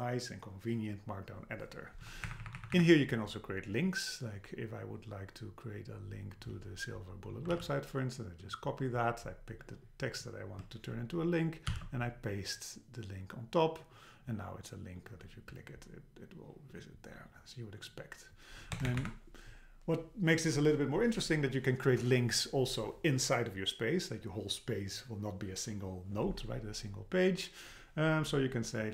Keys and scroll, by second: 2.3 Up, 3.0 Up, 7.5 super+c, 11.7 super+v, 18.7 Return, 19.0 Up.